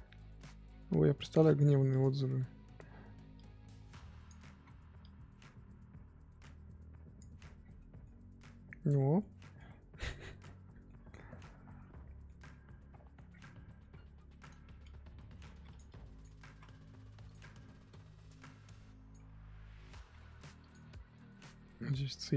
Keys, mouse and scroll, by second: 0.4 ctrl+z, 2.0 click, 3.3-7.3 drag, 7.3-7.7 scroll down 8, 7.7-9.6 middle drag, 9.6 scroll up 1, 9.9 middle click, 10.3-10.8 scroll up 3, 10.9-13.3 middle drag, 13.3-13.6 scroll down 1, 13.6 middle click, 13.8 scroll down 1, 13.9-14.3 scroll up 8, 15.4 f, 15.8 click, 16.4 ctrl+z, 17.3 click, 17.9-19.3 drag, 19.3-20.1 scroll up 2, 20.1 f, 20.9-22.3 drag.